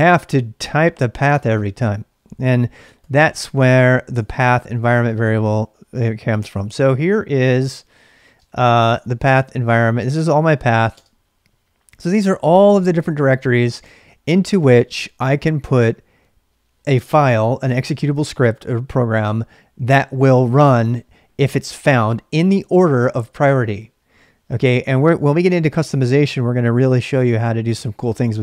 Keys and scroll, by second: 3.0 ctrl+c, 3.6-5.3 typing, 6.4-9.3 typing, 10.9 space, 15.2 q.